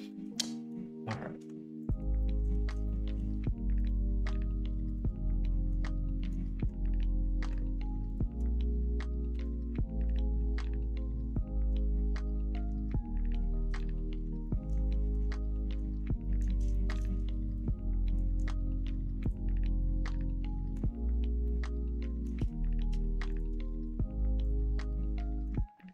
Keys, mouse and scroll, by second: 0.3 middle click, 2.1 middle click, 2.8 shift+middle click, 3.7 alt+shift+click, 4.8 alt+shift+click, 5.3 middle click, 6.1 middle click, 8.0 alt+shift+click, 9.2 ctrl+e, 11.8-13.2 middle drag, 13.7 middle click, 14.4 middle click, 14.8 shift+middle click, 15.5 middle click, 16.1 middle click, 16.6 shift+middle click, 17.0 middle click, 18.0 middle click, 19.7 middle click, 21.4 middle click, 23.3 shift+click, 24.8 middle click, 25.7 middle click.